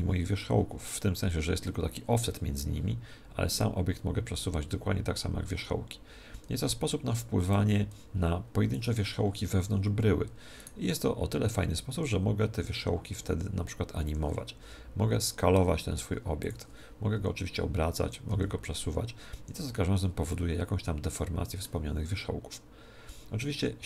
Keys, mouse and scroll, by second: 3.6 click, 8.0 middle click, 8.8-12.5 right drag, 9.9 z, 12.0 r, 14.6 s, 16.5 Escape, 16.5 click, 17.2 r, 18.3 g, 20.3-22.3 middle drag, 23.6-23.8 middle drag.